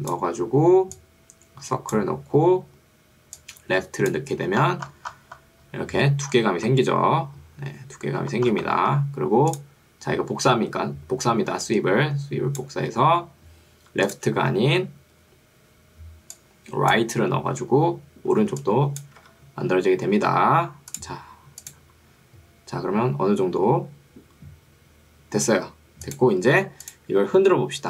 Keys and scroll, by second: 18.5 ctrl+2, 19.3 Escape.